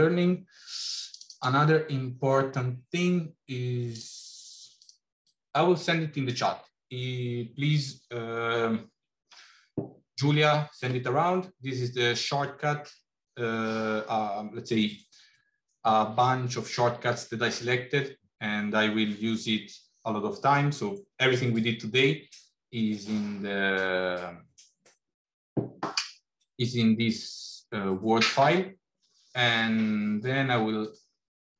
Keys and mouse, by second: 30.7 click.